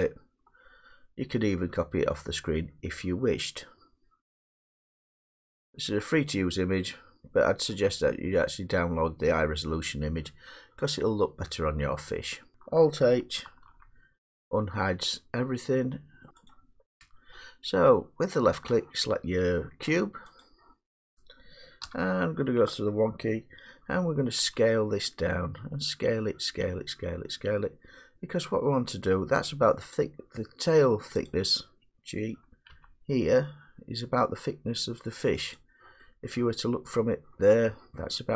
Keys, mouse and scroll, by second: 0.0-3.8 middle drag, 12.5-13.3 scroll down 4, 13.4 alt+h, 16.2 middle click, 16.3 click, 16.3 h, 16.5 click, 18.3 middle click, 18.7 click, 20.0 middle click, 20.4 click, 21.8 1, 24.4 s, 31.2 click, 32.7 g, 35.5 click, 36.9 middle click.